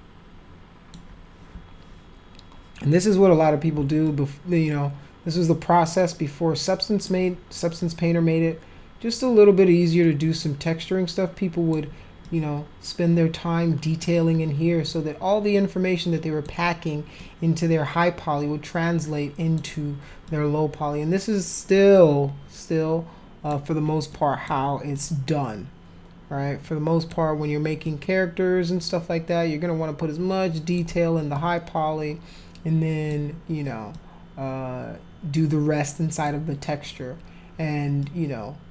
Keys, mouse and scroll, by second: 4.1-7.1 alt+drag, 7.8-11.7 alt+drag, 12.3-14.0 alt+drag, 14.8-16.4 alt+drag, 17.2-19.6 alt+drag, 20.3-23.5 alt+drag, 24.1 alt+click, 25.0-27.1 alt+drag, 27.9-30.8 alt+drag, 31.3-33.1 alt+drag, 33.9-36.3 alt+drag, 38.0-38.7 alt+drag.